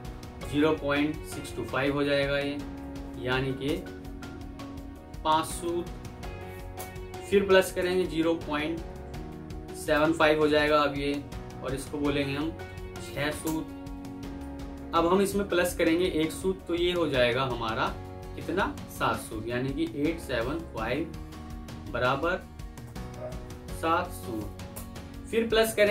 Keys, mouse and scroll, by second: 0.3-1.5 typing, 2.7 typing, 4.9-6.2 typing, 6.6 Return, 7.7 typing, 9.6-10.5 typing, 11.8-12.8 typing, 13.3 Return, 13.9-14.3 typing, 19.7-20.3 typing, 21.5 typing, 23.1-24.1 typing, 24.6 Return.